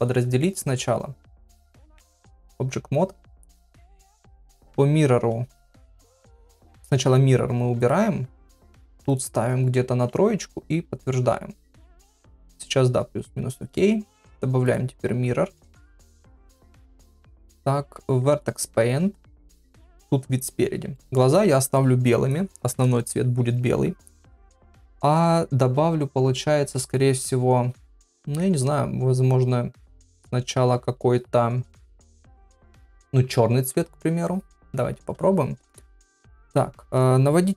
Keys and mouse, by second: 0.0 Tab, 0.0 click, 1.2 KP_Divide, 1.8 ctrl+Tab, 3.2 middle click, 3.8 shift+middle click, 4.4 middle click, 7.8 click, 9.0 click, 10.9 ctrl+a, 12.0 Tab, 12.5 Tab, 17.3 ctrl+Tab, 19.4 KP_1, 20.9 shift+middle click, 28.0 shift+middle click.